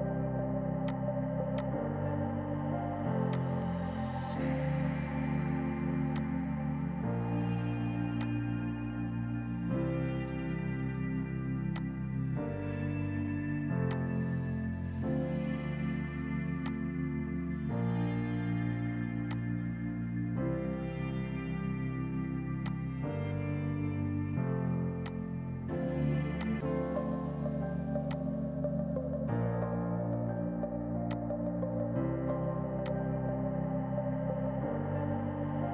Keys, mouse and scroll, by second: 1.5 click, 2.4 space, 3.2 click, 3.5 3, 4.0 Return, 4.7 p, 6.1 click, 6.7 shift+right click, 8.1 click, 9.0 KP_1, 9.1 KP_Decimal, 9.3 KP_7, 9.5 KP_5, 9.7 Return, 11.5 F2, 11.7 click, 15.2 right click, 16.6 click, 22.6 click, 24.9 F2, 25.0 click, 30.2 F3, 31.0 click, 31.2 right click, 32.8 click.